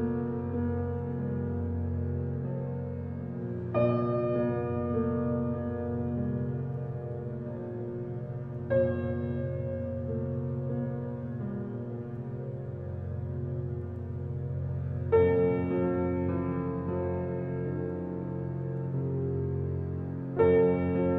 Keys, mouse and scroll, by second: 1.2 click, 1.9 click, 2.7 Tab, 3.6 click, 5.2 scroll down 1, 5.9-10.4 middle drag, 16.4 click, 18.3 g.